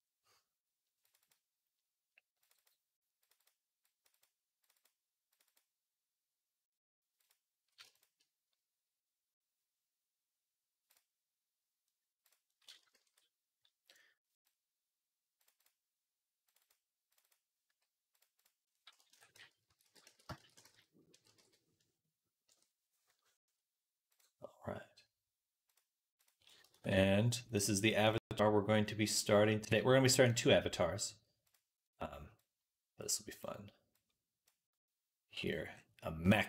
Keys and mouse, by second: 12.1-25.6 middle drag, 12.8 ctrl+s, 25.6 click, 26.0 click, 26.6 ctrl+s, 36.3 b.